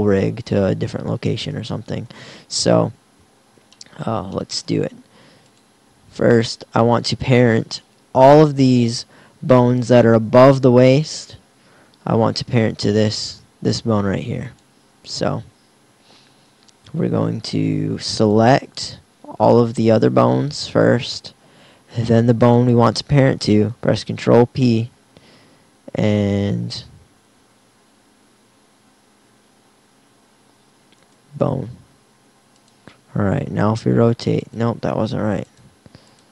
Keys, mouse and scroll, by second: 23.5 ctrl+p, 32.7 right click, 33.5 r.